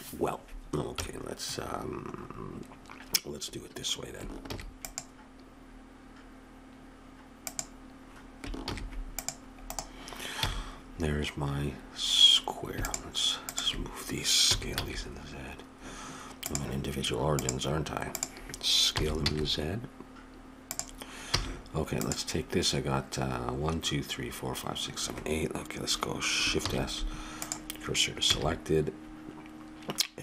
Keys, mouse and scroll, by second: 0.9 KP_1, 2.2-4.1 middle drag, 4.5 ctrl+r, 8.7 ctrl+r, 10.4 a, 10.8-12.8 middle drag, 12.8-15.9 drag, 14.4 s, 17.4-19.1 drag, 19.0 s, 21.3 a, 22.0-24.5 drag, 26.6 shift+s, 28.3 a.